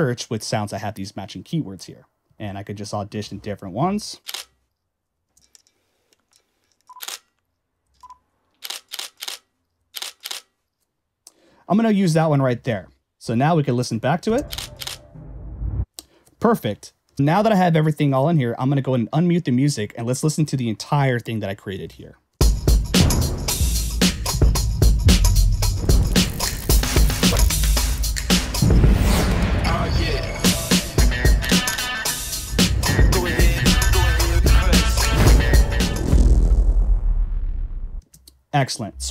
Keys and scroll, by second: 13.1 Escape, 14.3 space, 15.8 space, 21.9 Return, 22.4 space, 38.0 space.